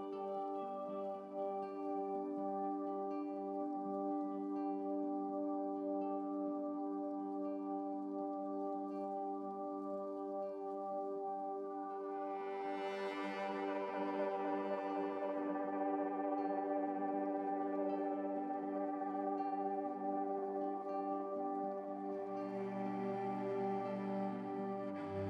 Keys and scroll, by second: 4.0 7, 18.0 ctrl+z, 18.2 ctrl+x, 19.5 ctrl+z, 20.0 x, 22.3 ctrl+z, 22.5 ctrl+z, 23.0 ctrl+z.